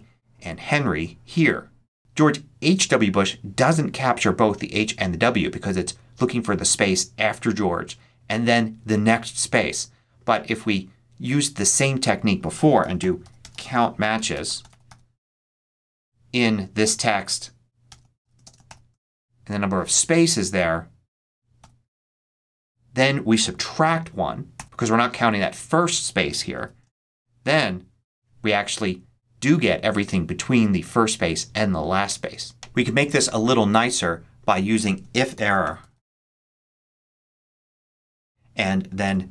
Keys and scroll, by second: 12.7-15.3 typing, 17.8 ', 17.9 shift+,, 18.3 shift+space, 18.6 shift+', 21.5 shift+0, 24.4 -, 26.4 1, 26.9 shift+0, 27.4 shift+Return, 28.1 Return, 35.0-36.3 typing, 37.3 shift+super+9, 37.4 shift+super+a, 37.6 super+Right, 38.6 Right, 38.9 ', 39.1 shift+,.